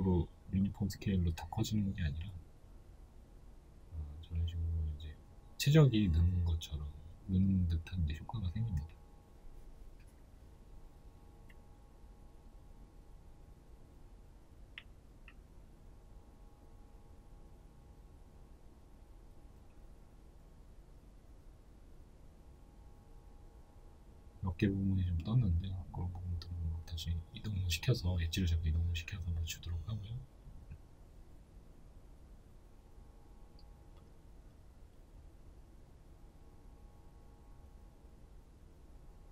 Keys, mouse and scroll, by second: 0.5 alt+s, 14.6 middle click, 14.8-15.2 scroll down 2, 15.2-15.6 scroll up 1, 15.6 Tab, 16.5 shift+middle click, 16.9 Tab, 18.8 right click, 19.1 alt+right click, 19.4 alt+right click, 20.3 right click, 20.7 middle click, 21.6 right click, 22.4 2, 22.8 right click, 23.0 alt+right click, 24.6 KP_1, 25.6 g, 28.6 o, 31.1 click, 31.6 right click, 31.9 alt+right click, 33.1 g, 36.1-36.6 scroll down 2, 36.6 Tab, 37.2-39.3 shift+middle drag, 37.5-38.0 scroll up 2, 38.3-39.3 scroll down 2.